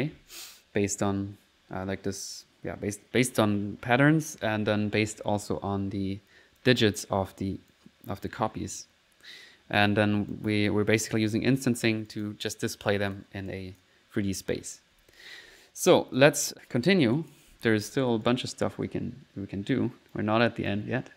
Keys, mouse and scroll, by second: 2.3 click, 4.9 middle click, 6.6 click, 7.7 click, 9.2 middle click, 9.8 click, 10.4 click, 11.2 right click, 11.8 right click, 11.8 click, 12.1 click, 12.5 middle click, 13.1 click, 13.5 click, 15.0 1, 15.8 middle click, 16.2 click, 17.2 click, 18.3-20.5 right drag, 20.7-21.1 drag.